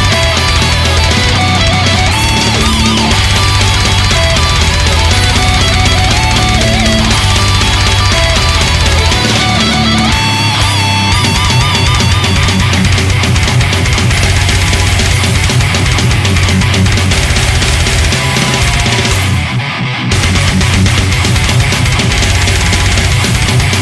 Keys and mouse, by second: 4.5 ctrl+s, 8.6 ctrl+z, 9.0 ctrl+z, 13.1 ctrl+z, 21.0 ctrl+z, 23.6 ctrl+z.